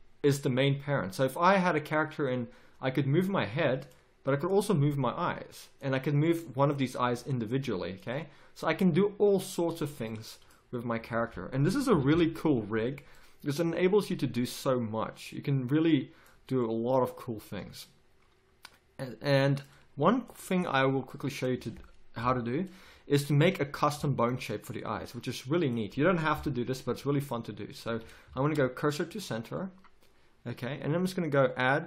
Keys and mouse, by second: 4.8 g, 7.0 g, 8.8 g, 10.9 a, 11.1 a, 11.9 alt+g, 12.1 alt+r, 12.4 a, 15.8 click, 16.0 click, 21.1-22.2 middle drag, 21.5 a, 22.2 KP_1, 26.3 KP_1, 27.0 z, 27.8 z, 28.4 shift+s.